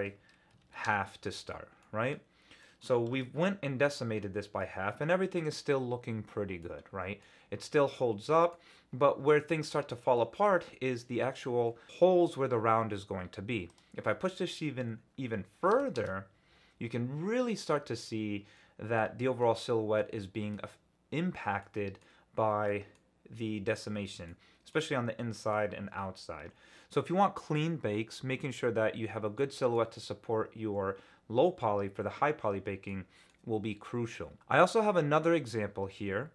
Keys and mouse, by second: 1.8-2.1 middle drag, 2.6 middle drag, 2.7 click, 3.1 ctrl+alt+z, 3.4-3.9 drag, 4.4-5.3 drag, 6.6-7.2 drag, 8.2 middle click, 10.2 middle click, 13.8-16.0 drag, 16.9-18.9 middle drag, 19.4-19.8 drag, 19.8-20.5 middle drag, 21.6 click, 22.7 click, 24.3-24.7 drag, 25.5-26.7 drag, 26.7 middle click, 29.4-29.7 middle drag, 32.9-33.3 middle drag.